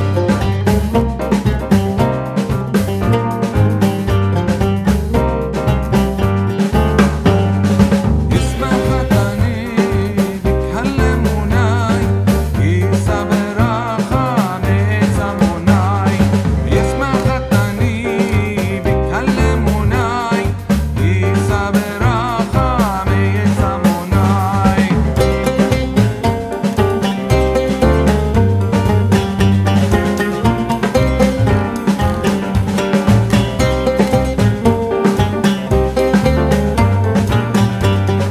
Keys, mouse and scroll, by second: 5.8-9.4 drag, 9.7 click, 9.9 alt+scroll down 1, 10.8-16.6 drag, 17.2-18.4 drag, 18.6 right click, 20.7-27.4 drag, 27.5 click, 27.8-36.9 alt+drag.